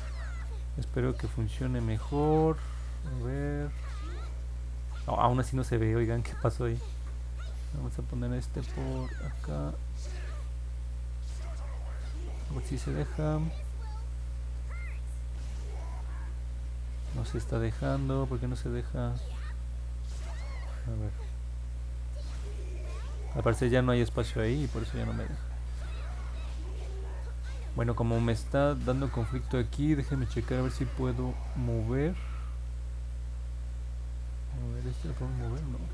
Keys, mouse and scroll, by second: 1.4 click, 8.4-19.4 drag, 21.3-26.1 drag, 31.5 click, 34.5-35.9 drag.